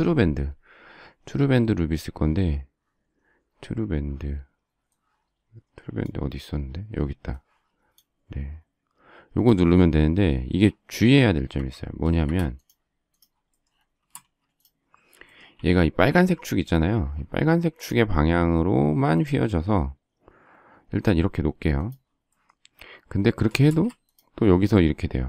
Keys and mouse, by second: 5.0 click, 9.3 click, 11.5 Escape, 12.1 space, 12.2 Escape, 14.1 space, 14.2 space, 15.5 q, 23.6 space.